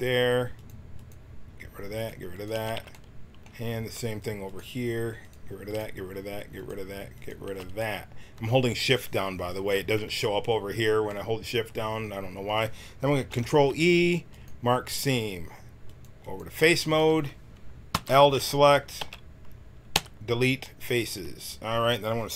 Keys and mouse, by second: 2.8-7.5 middle drag, 7.7 middle click, 8.4-9.8 drag, 13.2 ctrl+e, 16.6 a, 16.9 a, 17.9 l, 18.9 x.